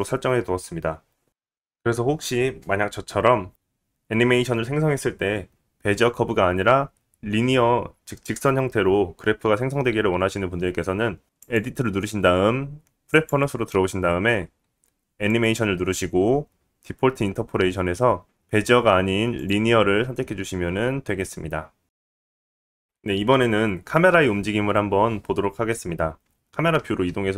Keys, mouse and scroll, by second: 0.5-12.7 drag, 14.3 click, 14.5 click, 14.9 click, 15.1 click, 15.3-18.0 drag, 15.6-18.0 middle drag, 15.6-18.0 right drag, 18.4-22.5 drag, 18.4-22.5 middle drag, 18.4-22.5 right drag, 22.6 click, 22.6 middle click, 22.6 right click, 22.8-26.2 drag, 22.8-26.2 middle drag, 22.8-26.2 right drag.